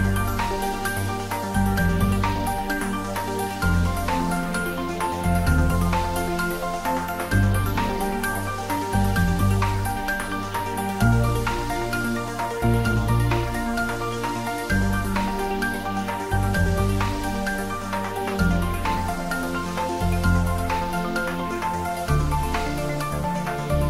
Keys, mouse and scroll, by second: 1.1-2.1 typing, 3.1 click, 4.8 scroll down 1, 6.6 click, 9.1 scroll down 1, 9.4-10.4 middle drag, 12.8 click, 17.7 click, 19.9 click, 21.1-22.0 middle click, 21.8 click, 22.7 x, 22.8 click, 23.2-23.8 middle click.